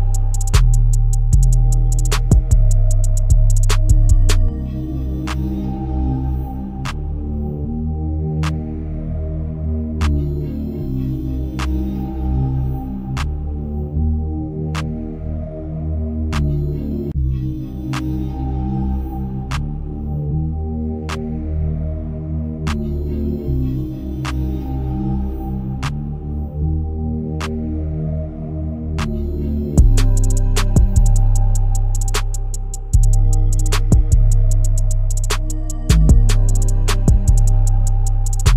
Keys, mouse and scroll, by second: 1.3-1.9 drag, 2.0-2.7 shift+middle drag, 2.7-3.3 scroll down 3, 3.3-3.7 shift+middle drag, 3.7-4.1 scroll up 1, 4.1 Tab, 7.1 ctrl+r, 10.8 alt+click, 14.1-16.4 drag, 16.4 Tab, 16.8-18.2 right drag, 18.2-19.7 middle drag, 19.7-20.2 scroll up 1, 20.2-20.9 shift+middle drag, 20.9-21.8 scroll up 2, 21.8-23.2 scroll down 1, 23.2 click, 24.6-26.2 drag, 27.5-33.0 drag, 34.1-35.2 scroll down 5, 35.2 KP_0, 36.0-36.5 scroll up 3, 36.5 shift+middle click.